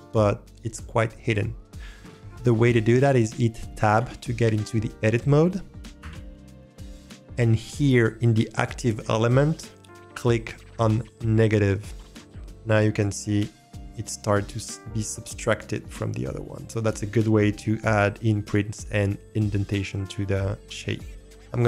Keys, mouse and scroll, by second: 4.0 Tab, 6.0 n, 12.2 click, 13.2 s, 14.6-21.6 drag.